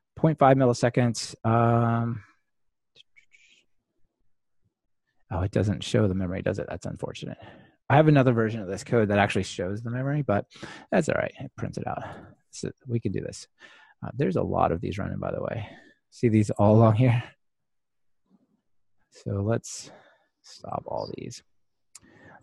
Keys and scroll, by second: 17.9 super+F2.